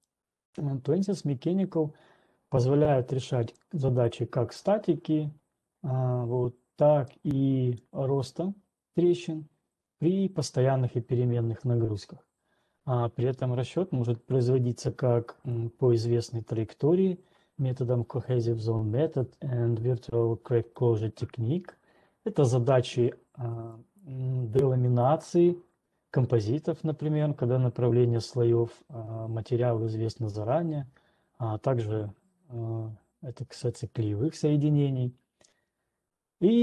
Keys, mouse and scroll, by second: 0.2 click, 4.3 click, 8.3 click, 16.3 click, 24.3 click, 25.3 click.